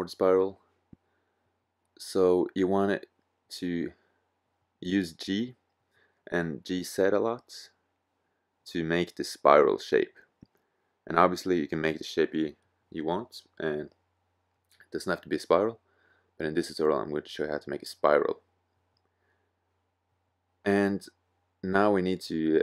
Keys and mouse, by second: 2.1 g, 9.8 g, 9.9-12.0 drag, 13.8 middle click, 15.1 g, 18.2 middle click, 19.3 click, 19.3 middle click, 19.4 right click, 19.7 middle click, 21.8 e.